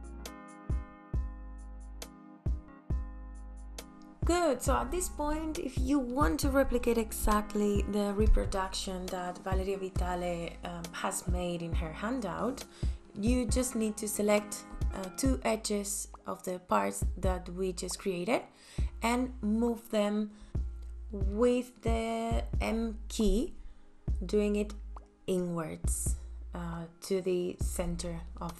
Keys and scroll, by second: 0.0 space.